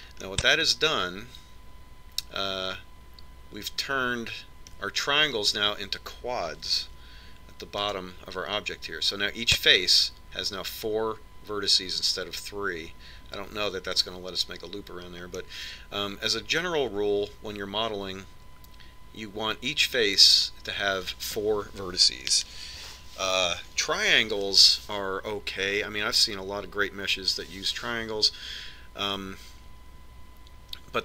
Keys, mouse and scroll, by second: 1.9-3.8 middle drag, 8.5 ctrl+Tab, 17.1-18.9 middle drag.